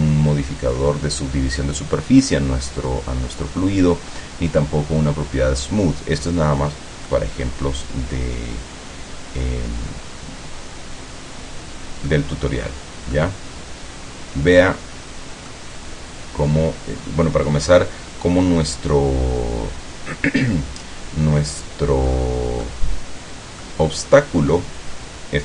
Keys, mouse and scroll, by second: 7.2-12.4 middle drag, 12.4 scroll down 2, 13.3-15.8 middle drag, 22.2-22.5 scroll up 2, 22.7-23.9 middle drag, 25.1 scroll down 1.